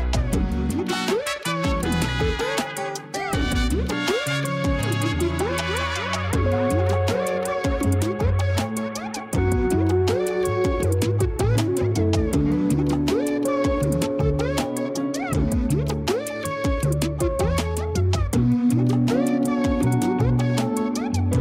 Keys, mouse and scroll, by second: 2.8 shift+d, 4.2 KP_3, 4.8-5.2 scroll down 1, 5.2 r, 6.9 g, 8.2 KP_0, 8.9 scroll up 1, 9.5 r, 10.8 g, 13.2 r, 16.1 g, 19.6-21.4 drag.